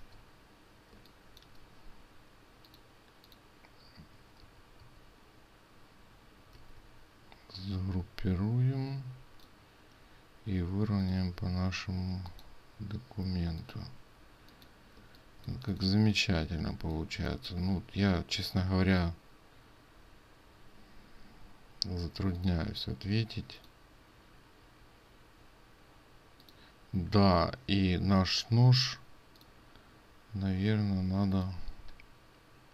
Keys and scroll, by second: 0.0 ctrl+v, 4.5 ctrl+z, 4.8 ctrl+z, 6.8 ctrl+g.